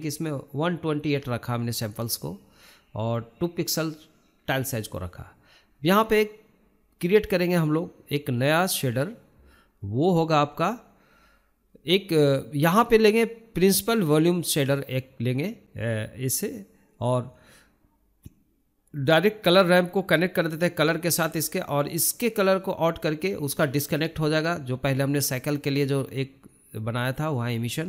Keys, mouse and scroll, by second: 0.7 scroll down 1, 2.0-11.2 drag, 11.2 middle click, 11.7 scroll down 2, 12.0-12.9 shift+middle drag, 12.9-13.9 drag, 15.5 click, 16.1 shift+middle drag, 16.3 scroll up 4, 16.6 shift+middle click, 17.1 click, 27.5 click.